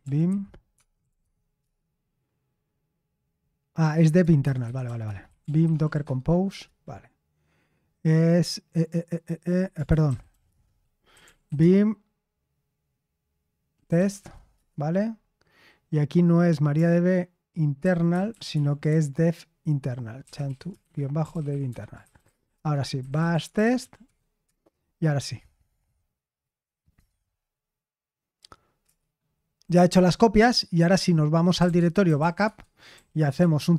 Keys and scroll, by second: 0.0-1.6 typing, 1.6 Return, 4.1-6.4 typing, 6.4 Return, 9.6-11.9 typing, 13.6-14.3 typing, 14.5 Return, 17.5-26.3 typing, 21.6 Escape, 31.3-33.7 typing.